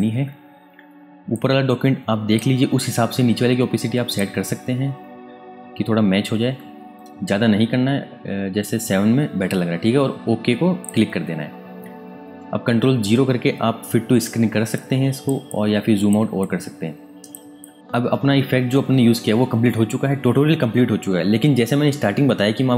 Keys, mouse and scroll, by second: 1.0 space, 1.3 click, 1.6 space, 4.1 click, 4.5-5.3 scroll down 1, 5.9-8.0 scroll up 1, 8.0-8.6 scroll down 1, 8.6-9.3 scroll up 1, 10.8 click, 13.0 ctrl+KP_0, 14.1 space, 14.7 ctrl+alt+click, 16.4 ctrl+click.